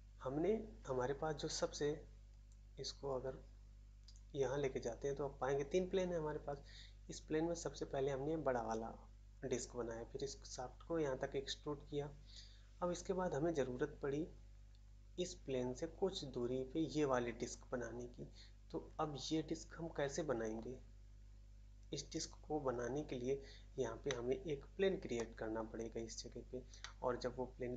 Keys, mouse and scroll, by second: 24.0 middle click, 25.1 middle click, 26.8 middle click.